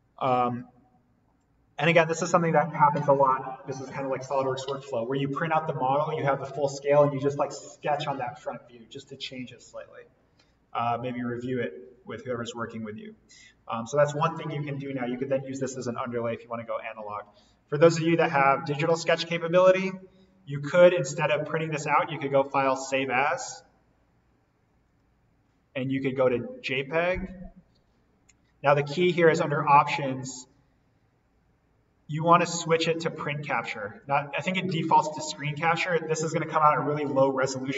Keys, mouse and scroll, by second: 12.0 click, 17.9 click, 23.0 click, 27.6 click, 34.0 click.